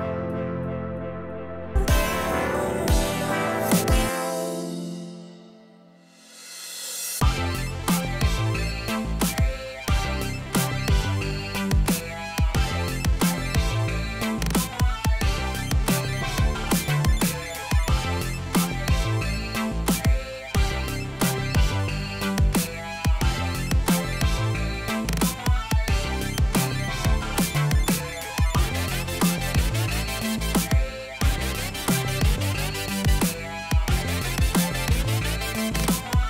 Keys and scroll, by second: 28.1-29.8 typing, 32.0-33.2 typing, 36.1-36.2 typing.